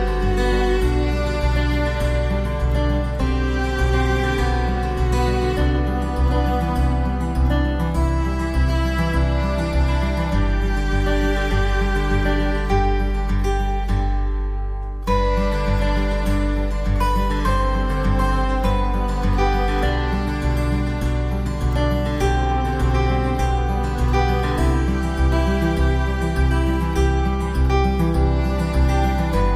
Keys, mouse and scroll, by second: 1.4-1.9 scroll down 3, 2.8 Tab, 3.3 middle click, 5.6 click, 6.3 middle click, 7.2-8.6 scroll up 4, 8.9 right click, 9.6 middle click, 12.4 ctrl+right click, 13.0 middle click, 14.6 click, 14.9 scroll down 2, 16.1 click, 17.7 middle click, 19.3 s, 23.0 click, 26.5 click.